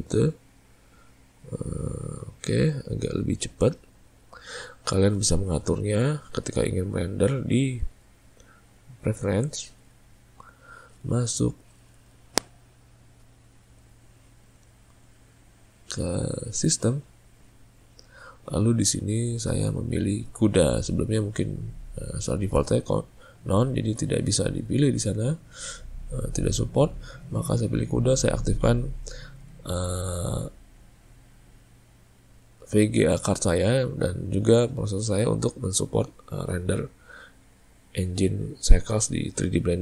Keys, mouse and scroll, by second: 6.7-9.8 drag.